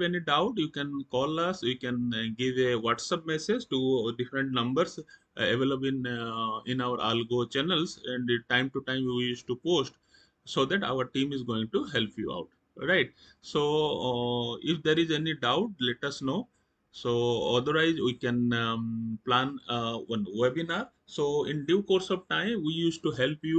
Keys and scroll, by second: 12.1 Down, 13.2 Up, 14.5 Escape.